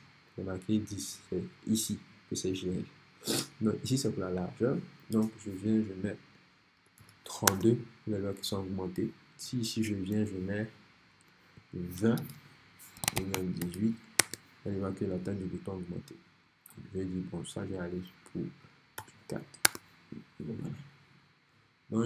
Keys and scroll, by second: 6.6-7.6 typing, 11.8-14.1 typing, 14.2 Return, 19.0 shift+4, 19.7 Return.